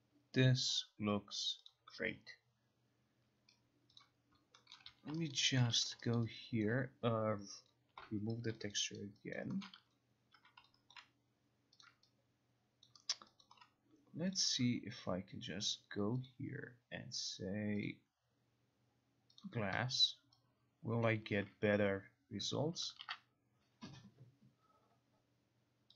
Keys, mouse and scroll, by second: 1.8 click, 4.0 click, 4.8 alt+middle click, 5.0 q, 5.4 alt+right click, 5.7 alt+click, 5.8 q, 6.2 alt+right click, 6.7 alt+click, 6.7 alt+right click, 7.8 click, 8.0 Delete, 8.8 alt+click, 9.0 alt+right click, 9.7 alt+middle click, 9.9 q, 10.4 q, 11.0 alt+click, 11.9 click, 12.9 alt+click, 13.2 alt+middle click, 13.2 alt+click, 14.4 click, 14.6 click, 16.4 click, 17.9 click, 19.5 click, 21.1 click, 21.3 click, 22.6 click.